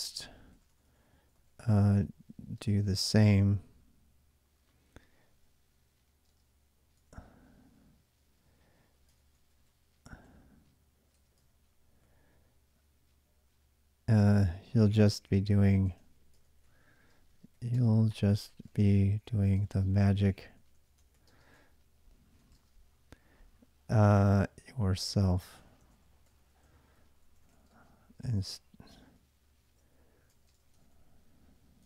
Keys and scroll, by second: 0.0-3.6 typing, 6.1-6.8 typing, 8.7-22.8 typing, 24.0-31.8 typing.